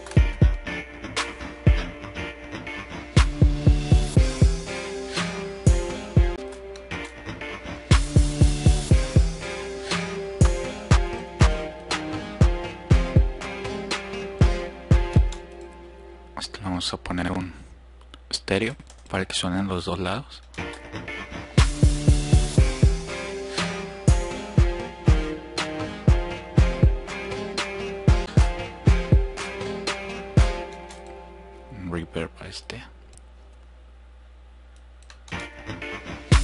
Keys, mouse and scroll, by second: 15.0 click, 18.0 right click, 20.2-20.6 drag, 30.0-30.5 drag, 31.2-33.0 right drag, 36.0 click.